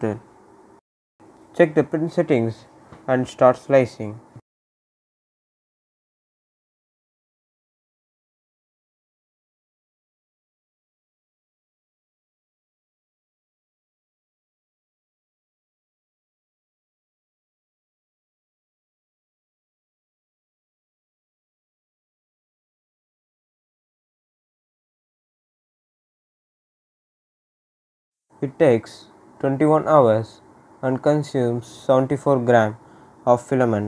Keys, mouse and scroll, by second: 0.9 click, 4.3 click, 4.7-8.7 right drag, 8.7-9.2 scroll up 1, 9.5 right click, 10.0 scroll down 1, 10.8-12.0 right drag, 12.0 click, 13.7-16.4 right drag, 16.4-17.3 scroll up 1, 17.3-21.0 middle drag, 28.2-31.8 right drag, 33.3-33.8 right drag.